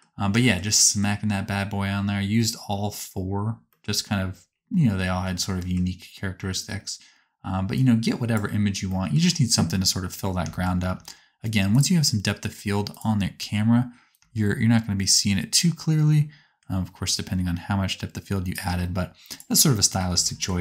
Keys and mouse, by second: 7.8 middle click, 7.9 click, 7.9 right click, 8.0 middle click, 8.1 click, 8.1 right click, 8.2 middle click, 11.7-12.9 drag, 13.0-16.7 drag, 14.1-16.7 shift+middle drag, 14.1-16.7 shift+right drag, 19.3 click.